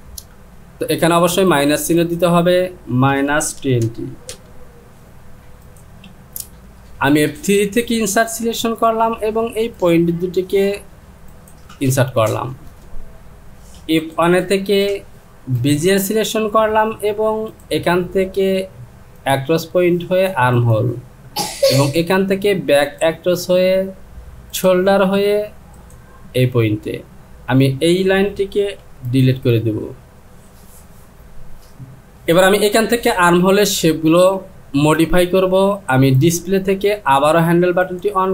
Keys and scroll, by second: 3.6 KP_2, 3.8 KP_0, 4.3 Return, 28.9 Delete.